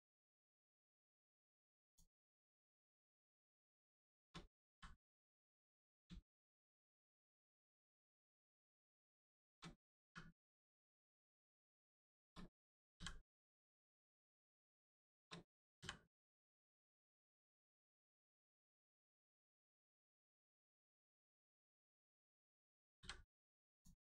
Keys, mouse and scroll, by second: 1.8 shift+click, 2.3 shift+click, 2.9 shift+click, 4.7 click, 6.2 shift+middle click, 7.4 click, 7.8 shift+click, 8.3 shift+click, 10.0 click, 10.7 click, 11.8 shift+click, 13.5 click, 14.7 shift+click, 16.4 click, 17.4 shift+middle click, 18.8 click, 19.6 shift+click, 22.9 m, 23.7 click.